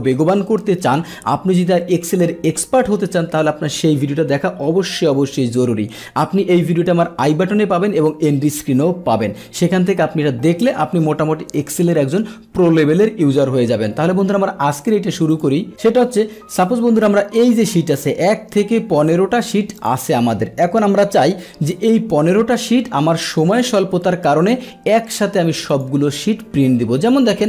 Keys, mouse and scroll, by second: 15.3 click, 16.5 click, 18.0 click, 19.0 click, 19.8 click, 25.7 click.